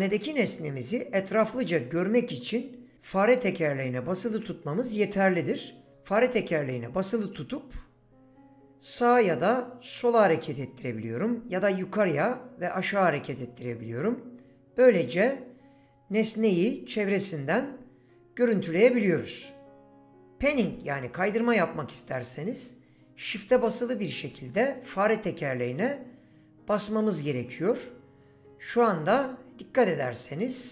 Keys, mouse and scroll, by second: 5.9 middle click, 25.8 shift+middle click.